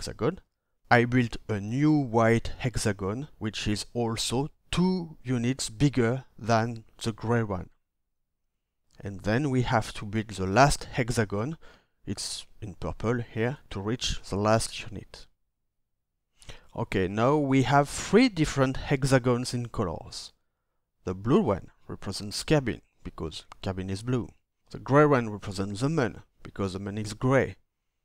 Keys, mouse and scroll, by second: 8.1 ctrl+d.